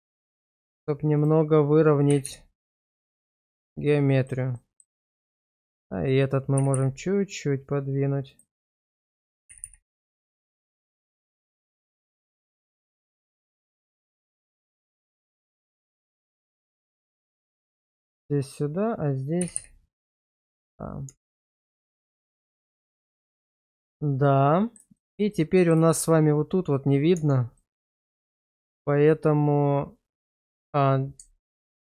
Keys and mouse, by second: 0.5 click, 2.1 g, 2.2 g, 4.2 click, 4.5 middle click, 5.0 shift+middle drag, 5.6 click, 6.6 g, 6.7 g, 9.0 click, 9.5 g, 9.6 g, 11.9 shift+middle click, 12.3 shift+middle click, 12.7 middle click, 13.4 shift+middle click, 14.2 click, 14.8 shift+middle click, 15.9 g, 16.1 g, 17.1 click, 17.5 shift+middle click, 18.4 click, 19.4 g, 19.6 g, 20.6 click, 21.1 Tab, 22.0-23.3 middle drag, 23.5 shift+middle drag, 24.2-24.7 middle drag, 25.0 shift+middle drag, 25.3-25.7 middle drag, 25.9 shift+middle drag, 27.1 Tab, 27.6 middle click, 28.7 click, 31.3 ctrl+click.